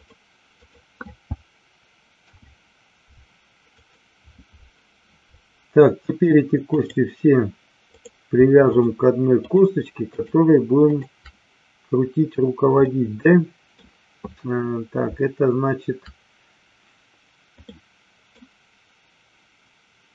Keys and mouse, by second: 0.6 click, 2.2 alt+p, 6.7 click, 7.8 click, 8.7 shift+click, 9.6 shift+click, 10.0 shift+click, 10.8 shift+click, 12.8 middle click, 17.7 middle click.